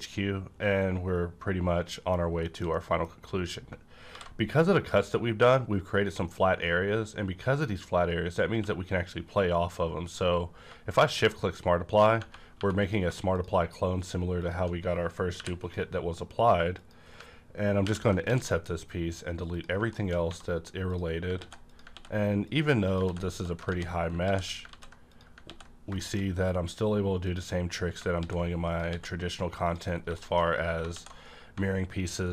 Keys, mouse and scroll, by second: 2.7 middle click, 3.2-3.7 scroll up 1, 4.0 alt+v, 4.7 click, 8.3 scroll up 1, 8.5 q, 11.1 shift+click, 12.2 Tab, 12.5 3, 12.5 Tab, 12.7 click, 13.3 click, 14.0 shift+click, 15.4 i, 17.8 ctrl+i, 18.2 x, 19.5 click, 19.8 middle click, 20.1 scroll up 1, 20.3 1, 20.8 click, 21.4 x, 21.7 click, 21.9 ctrl+x, 22.5 click, 23.0 x, 23.7 ctrl+z, 24.2 x, 24.7 ctrl+z, 25.0 click, 25.5 x, 25.8 scroll down 1, 26.0 middle click, 26.3 scroll up 1, 27.2 click, 27.5-28.0 scroll up 1, 28.2 ctrl+x, 28.7 click, 28.9 x, 29.5 click, 29.7 click, 29.9 scroll down 1, 30.1 shift+middle click, 30.4 scroll up 1, 30.9 x.